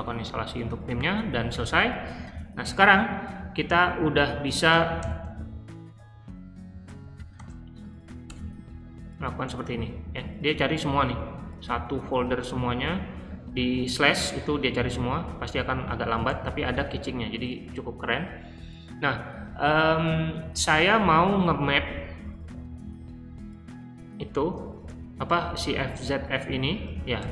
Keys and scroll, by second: 1.5 q, 4.9 shift+;, 6.8-7.3 typing, 8.2 Return, 16.2 ctrl+d, 17.5 k, 18.0 j, 27.1-27.3 typing.